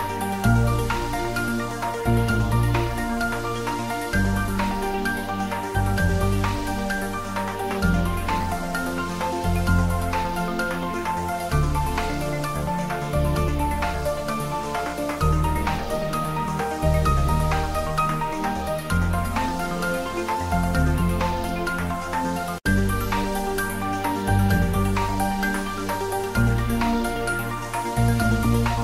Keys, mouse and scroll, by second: 1.1 right click, 1.8 click, 2.9 shift+right click, 3.7 click, 6.3 shift+right click, 7.3 click, 8.0 shift+a, 15.5 click, 16.1 s, 17.7 click, 18.0-20.5 typing, 18.6 click, 19.4 click, 20.8 ctrl+middle click, 21.8 shift+middle click, 22.7 g, 23.7 y, 25.2 Right, 25.5 click, 25.7-28.8 typing, 26.6 click, 28.0 click.